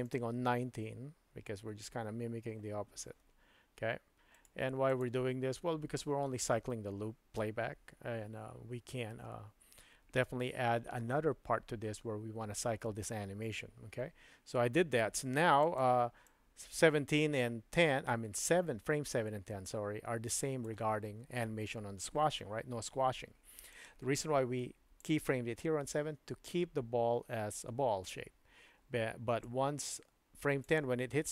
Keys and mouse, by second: 0.1 click, 4.4 right click, 15.7-20.8 drag, 23.8-25.2 drag, 29.5-30.7 drag.